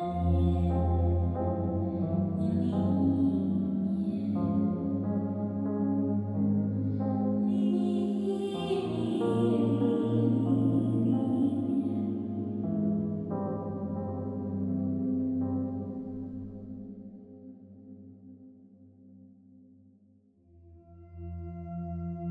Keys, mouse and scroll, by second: 9.4 click, 12.0 click.